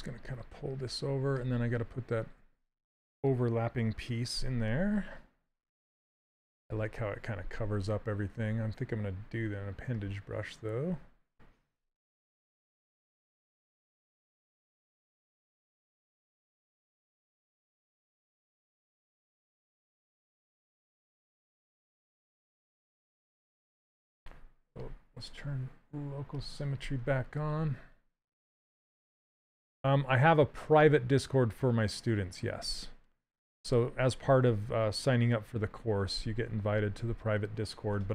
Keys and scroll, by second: 12.0 w, 24.4 ctrl+z.